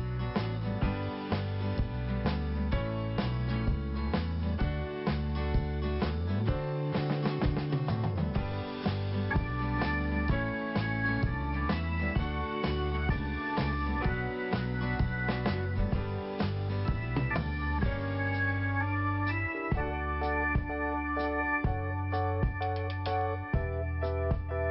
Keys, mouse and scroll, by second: 2.7 scroll up 1, 4.1 click, 4.1 click, 5.8 click, 9.7 click, 14.1 click, 19.7 scroll up 1, 20.5-21.0 scroll up 1, 24.3 click.